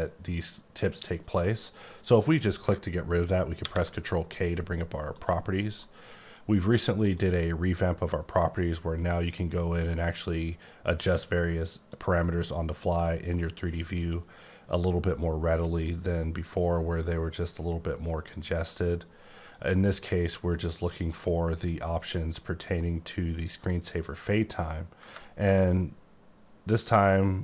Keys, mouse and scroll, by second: 1.2 click, 3.6 ctrl+k, 5.1 click, 6.1-6.4 drag, 7.0 click, 11.9 click, 12.4 click, 14.0 click, 15.1 click, 15.9 click, 19.4 click, 20.9 click, 22.0 click, 25.0 click.